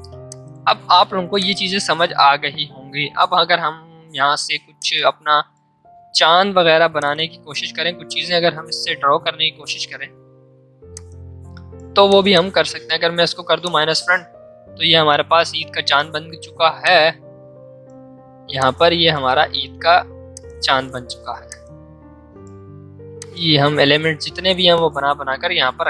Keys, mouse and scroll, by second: 1.3-4.0 drag, 4.0 l, 4.8 shift+click, 6.0 v, 10.9-13.6 alt+drag, 16.7-25.5 drag, 25.5 ctrl+2.